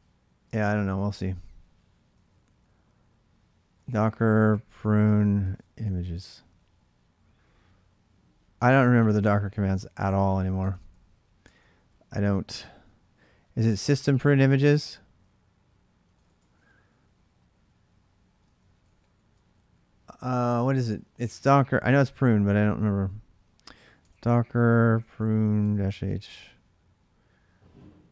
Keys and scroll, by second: 0.3 space, 0.9 Return, 2.0 ctrl+[, 2.2 typing, 3.2-6.4 typing, 8.1-9.3 typing, 10.0 ctrl+[, 10.4 Tab, 12.4-13.1 typing, 13.4 Tab, 13.6 Tab, 14.4-16.9 typing, 18.2-19.5 typing, 23.3-26.2 typing.